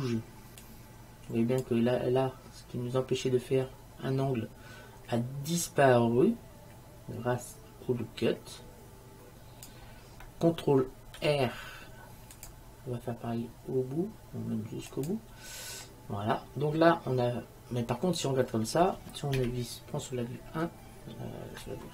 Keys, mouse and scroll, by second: 0.7-2.4 drag, 5.8-7.7 drag, 11.3 ctrl+r, 16.2 middle click, 19.5 KP_1.